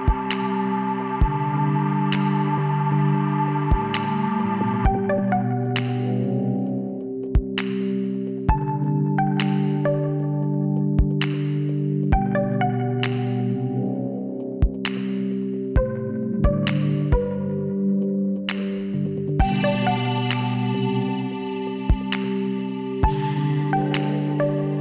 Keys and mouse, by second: 0.7-3.0 drag, 2.1 s, 3.8-6.7 drag, 4.0 a, 5.5 alt+h, 6.3 a, 8.5 KP_7, 9.1 z, 9.8-10.8 drag, 10.8 l, 13.5 b, 14.6-16.4 drag, 16.6 middle click, 16.8 z, 17.2-19.0 middle drag, 21.1-22.8 middle drag, 22.8 KP_1, 24.1 z.